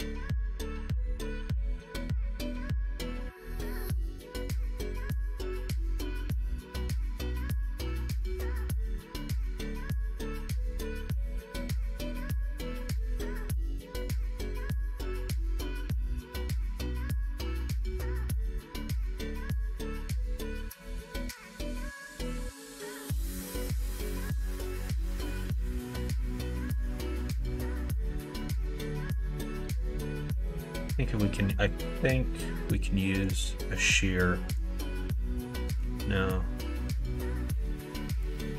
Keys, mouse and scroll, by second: 1.2 ctrl+b, 8.7-11.8 middle drag, 12.9 s, 14.9 KP_1, 15.2 KP_3, 17.2 s, 23.0 2, 23.5 alt+click, 24.1 s, 26.3 alt+click, 27.9 r, 29.4 ctrl+z, 30.7 click, 33.2 click, 34.6-35.7 drag, 35.8 ctrl+z, 37.2-38.2 drag, 38.3 ctrl+z.